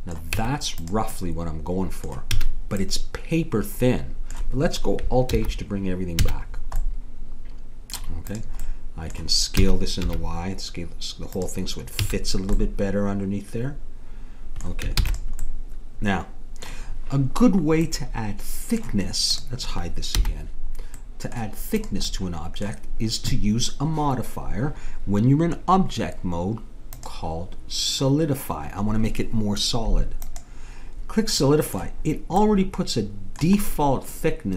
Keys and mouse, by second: 0.3 Tab, 2.4 a, 5.4 alt+h, 6.3 a, 8.3 middle click, 9.6 s, 12.1 a, 15.0 ctrl+s, 19.4-21.0 drag, 20.2 h, 21.8-23.7 drag, 26.9-28.7 drag, 31.5-32.7 middle drag.